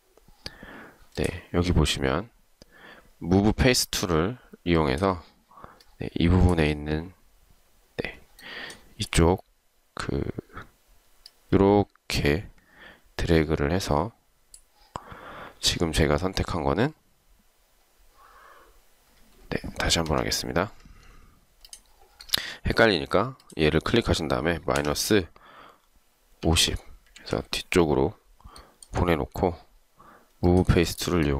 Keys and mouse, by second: 20.1 Escape, 24.9 typing, 26.3-27.0 typing, 27.3 Return.